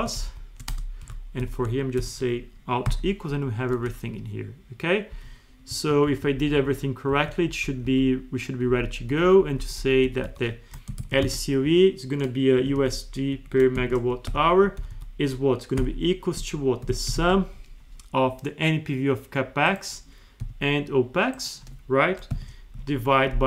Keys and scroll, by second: 1.1 Down, 2.0 Down, 2.9 alt+=, 5.1 Up, 5.7 F2, 6.1 Escape, 6.4 Up, 7.1 Escape, 7.5 Down, 9.1 Left, 10.1 Right, 10.2 Down, 11.7 Right, 14.8 Right, 17.2 Tab.